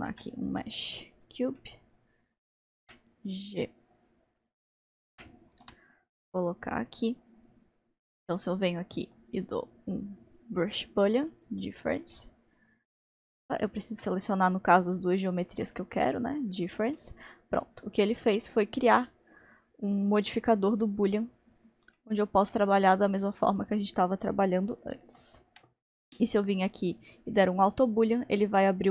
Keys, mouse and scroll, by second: 2.8 middle click, 2.9 g, 5.2 g, 6.8-11.3 middle drag, 11.4-13.8 drag, 16.2-17.5 drag, 17.5-20.0 middle drag, 22.0-25.0 shift+middle drag, 25.0 ctrl+z, 27.5 click, 28.4-28.9 middle drag.